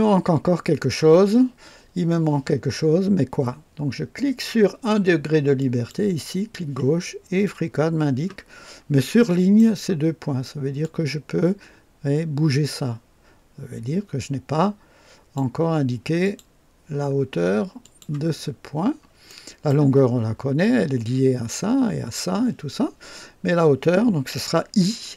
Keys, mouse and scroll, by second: 5.5 click, 8.5 scroll up 2, 9.0-9.7 right drag, 10.8-15.5 drag, 16.2 click, 17.8 click, 18.4-19.1 scroll down 2, 19.2 right click, 19.7 scroll up 1, 19.8 right click.